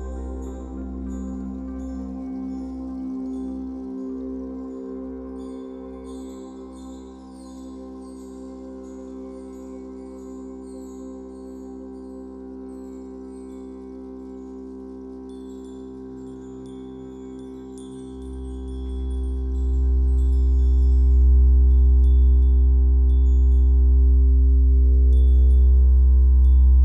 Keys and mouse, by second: 2.5 z, 4.8 space, 5.2 click, 5.3 space, 7.1 click, 10.5 space, 10.8 click, 11.4 =, 11.4 ctrl+z, 11.4 click, 11.5 space, 11.8 click.